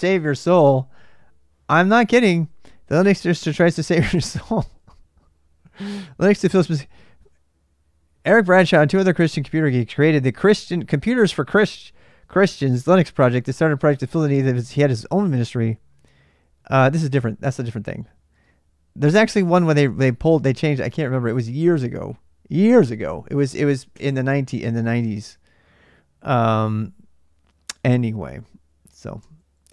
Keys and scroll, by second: 23.7 n, 29.0 q.